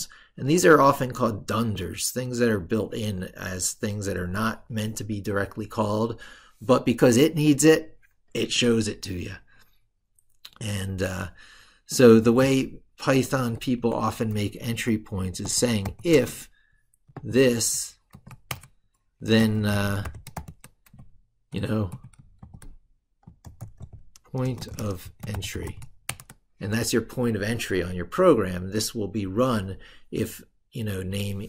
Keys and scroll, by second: 13.4 ctrl+Left.